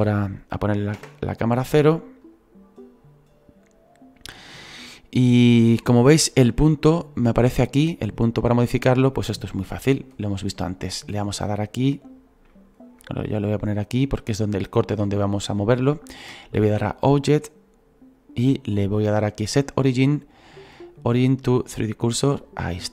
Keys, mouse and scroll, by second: 0.9 KP_0, 3.1 scroll down 2, 4.8-6.0 middle drag, 6.0 scroll down 2, 6.9-10.5 drag, 10.5-13.7 middle drag, 13.7 click, 14.2-22.0 shift+middle drag.